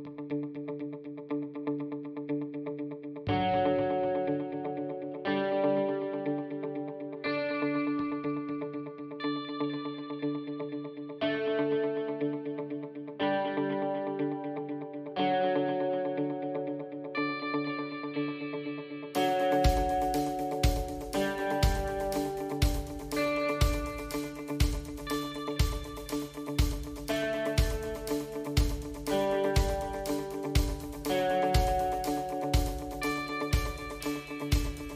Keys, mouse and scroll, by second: 2.0 shift+d, 4.1 shift+r, 4.5 shift+r, 4.8 shift+r, 5.2 shift+r, 6.1 shift+middle drag, 7.8 shift+z, 8.1-9.5 drag, 10.2 click, 11.7 drag, 12.5-13.2 drag, 14.0 drag, 14.7 click, 15.9 drag, 16.4 click, 17.7 click, 18.1 ctrl+z, 18.5 drag, 19.1-20.5 drag, 21.1 drag, 21.7 click, 23.9 shift+z, 24.5-25.2 middle drag, 25.4 shift+z, 26.5 shift+z, 27.1 a, 27.8 click, 29.1 KP_1, 30.9 Tab, 31.1 click, 32.9 ctrl+r, 33.3 Tab, 33.9 ctrl+r.